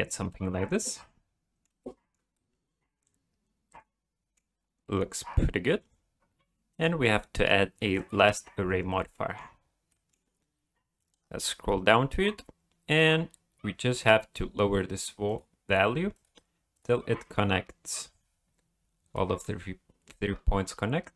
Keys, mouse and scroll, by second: 1.8 shift+middle click, 2.3 middle click, 5.2-6.2 scroll up 4, 6.7 click, 8.6-9.0 scroll down 3, 9.1 shift+middle click, 9.9 middle click, 10.5-11.8 scroll down 8, 13.9 scroll up 2, 15.3 click, 16.1 click, 16.7 click, 17.3 click, 19.1 middle click, 20.3 scroll down 1.